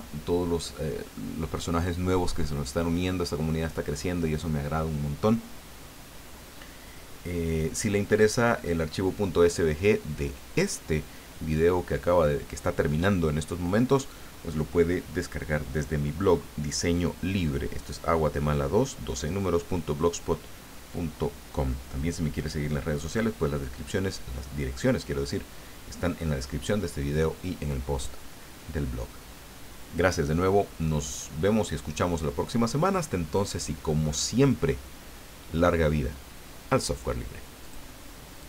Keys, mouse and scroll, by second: 37.6 click.